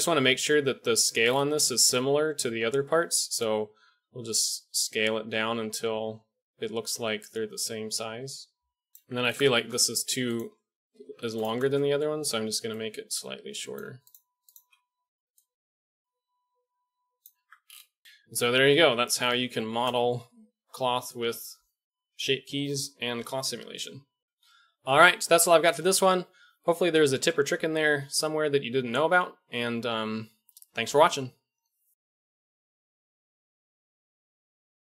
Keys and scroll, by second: 0.0 shift+KP_1, 3.9 s, 9.7 Tab, 10.1 1, 17.3 Tab, 18.3 a.